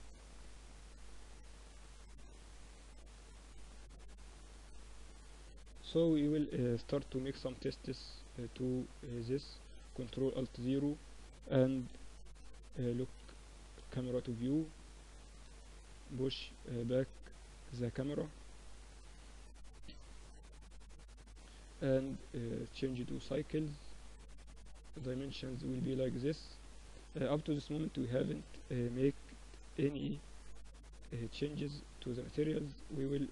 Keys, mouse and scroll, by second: 0.9 Tab, 2.6 Tab, 4.8 KP_1, 6.0 a, 9.2 ctrl+alt+KP_0, 11.2 n, 12.0-13.2 drag, 12.2 n, 13.2-15.5 middle drag, 21.6-27.2 drag, 27.0 KP_0, 27.6-29.6 middle drag, 29.6-30.6 drag, 30.8-33.3 drag, 30.8 right click.